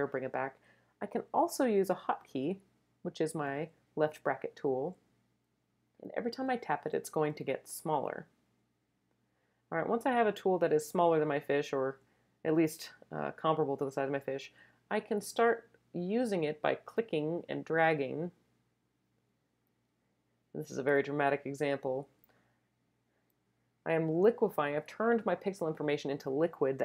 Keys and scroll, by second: 4.3 [, 4.7 [, 5.4 [, 6.5 [, 7.7 [.